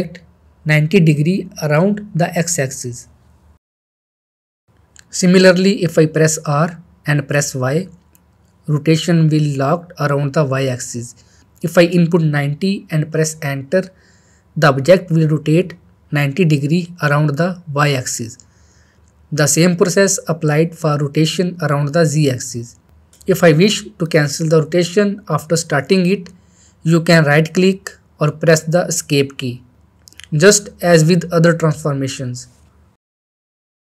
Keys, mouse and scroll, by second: 1.4-1.7 middle click, 1.7 scroll up 1, 2.0 shift+middle click, 2.7 shift+middle click, 5.1 ctrl+z, 5.6-6.3 middle click, 7.2 r, 8.5 y, 13.3-14.0 middle drag, 16.2 ctrl+z, 16.7 middle click, 17.1 shift+middle click, 18.8 r, 19.4 z, 26.4 Escape, 30.0 Escape, 30.0 r, 32.8 Escape, 33.7 r.